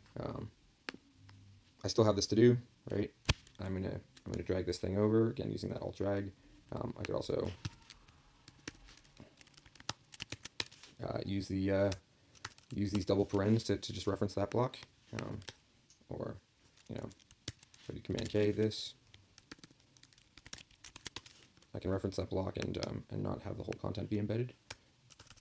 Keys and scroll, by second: 10.3 ctrl+j, 17.4 super+k, 17.5 super+k, 20.9 ctrl+j.